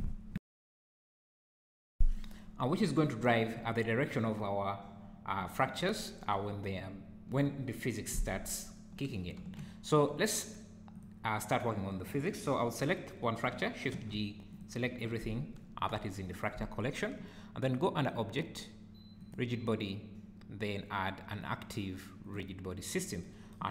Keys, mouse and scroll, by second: 9.5 Escape, 10.9 click, 14.2 shift+g, 18.0 click.